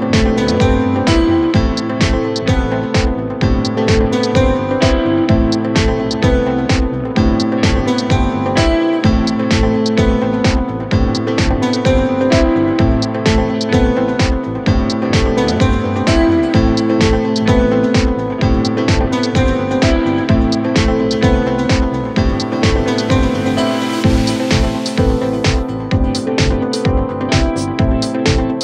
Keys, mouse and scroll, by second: 0.7 click, 1.9 g, 5.6 click, 6.7 g, 11.3 click, 12.4 alt+shift+click, 15.2 alt+shift+click, 17.5 alt+shift+click, 19.2 s, 21.2 ctrl+r, 23.8 s, 26.6 a, 27.4 s.